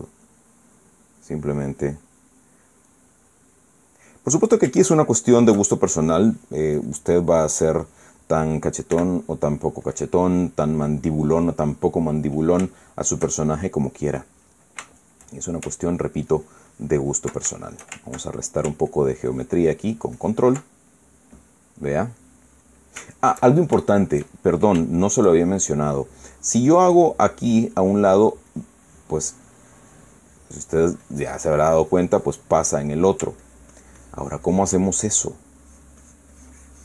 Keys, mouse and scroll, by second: 1.6 click, 2.5 click, 3.8-4.9 middle drag, 5.6-6.3 shift+middle drag, 7.5 click, 8.4 click, 9.0 middle click, 10.0 f, 10.6 click, 11.0 middle click, 11.8-13.1 middle drag, 13.4 shift+middle click, 14.1-15.4 shift+middle drag, 15.6 shift+middle click, 16.6-18.1 ctrl+drag, 18.2 ctrl+shift+middle click, 19.0 ctrl+shift+middle click, 19.6-20.8 ctrl+drag, 20.9-22.5 ctrl+drag, 22.5-25.0 middle drag, 25.6-26.8 shift+middle drag, 28.5-33.3 drag, 33.6 middle click, 34.1-35.5 ctrl+drag, 35.9 ctrl+middle click, 36.3-36.8 drag.